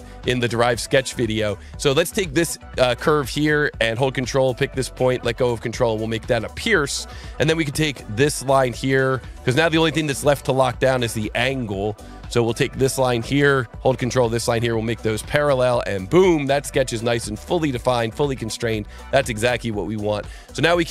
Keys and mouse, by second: 2.0 click, 5.0 ctrl+click, 6.2 click, 8.7 click, 10.2-12.1 drag, 12.8 click, 13.9 ctrl+click, 15.2 click, 16.0 click, 19.6 click.